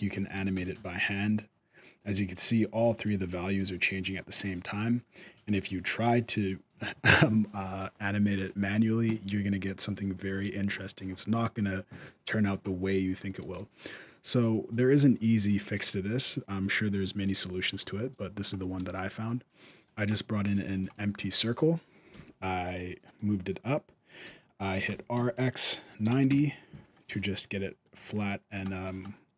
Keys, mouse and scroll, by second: 8.3-8.9 scroll up 1, 8.9 middle click, 10.1 alt+a, 10.5-11.4 shift+scroll up 2, 10.8 shift+middle click, 11.4-11.7 scroll down 1, 11.7-12.3 scroll up 3, 12.6 shift+middle click, 13.2 shift+a, 17.8 scroll up 1, 18.0 middle click, 18.5 g, 19.9 middle click, 20.7 shift+middle click, 21.0-21.6 scroll down 1, 21.9 r, 24.6 r, 26.9 s, 28.0 middle click, 28.4 shift+middle click, 28.8-29.2 scroll up 1, 29.2 middle click.